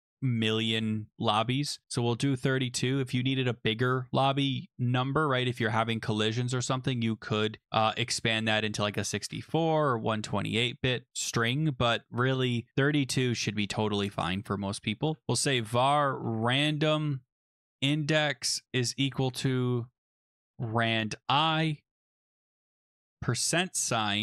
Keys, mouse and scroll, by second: 14.7-21.1 typing, 21.9 Tab, 22.6 Right, 22.9-24.2 typing.